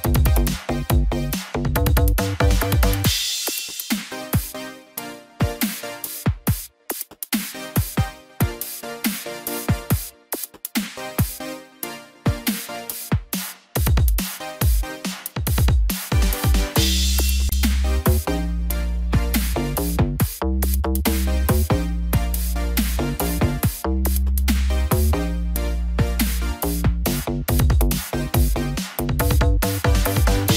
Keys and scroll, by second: 0.5 ctrl+0, 18.6 ctrl+t, 25.7 ctrl+t.